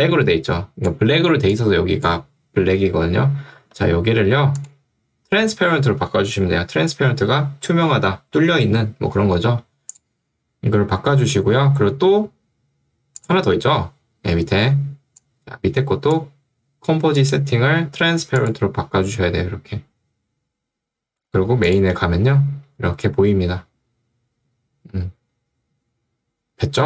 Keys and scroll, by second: 3.7 Escape.